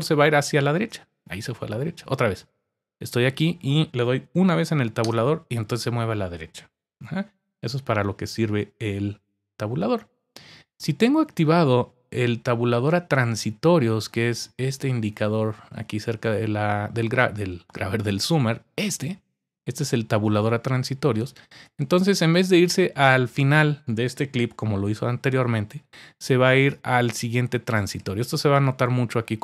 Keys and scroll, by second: 0.7 Tab, 5.0 Tab, 24.4-25.0 typing, 26.9-27.5 typing.